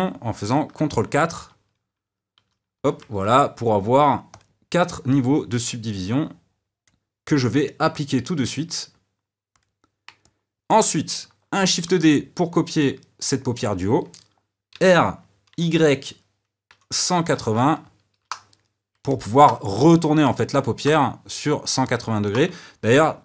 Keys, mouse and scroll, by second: 2.5 ctrl+4, 4.3 click, 5.9-10.2 drag, 10.2-11.7 middle drag, 11.7 shift+d, 14.7 r, 19.1-20.3 middle drag.